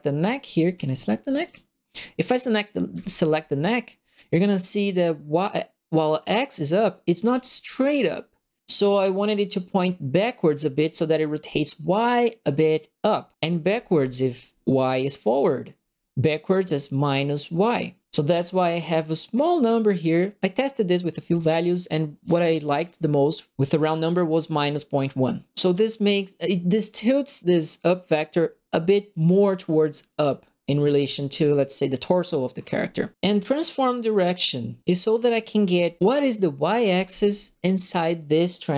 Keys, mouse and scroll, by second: 0.2 click, 1.4 click, 2.6-3.6 right drag, 2.9 q, 7.1 right click, 7.2 a, 13.3-14.4 typing, 13.4 right click, 18.2 click, 19.4 click.